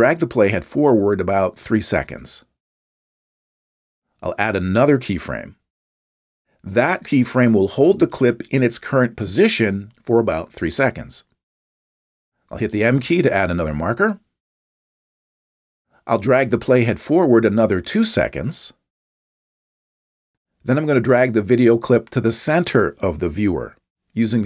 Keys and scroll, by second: 14.0 m.